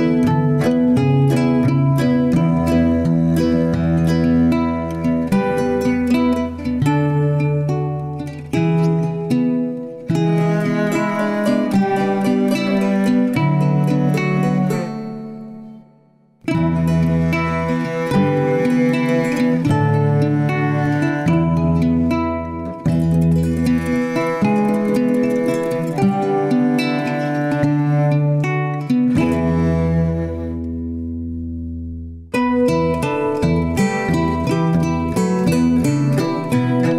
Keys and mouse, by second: 3.5 ctrl+z, 5.0 ctrl+shift+z, 6.4 middle click, 14.8 right click, 16.2 click, 16.6 click, 29.3 Tab.